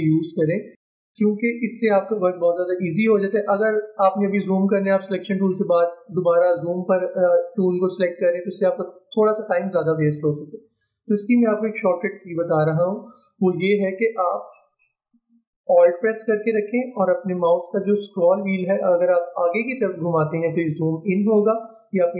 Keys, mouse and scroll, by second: 1.9 click, 19.1-19.5 alt+scroll up 1.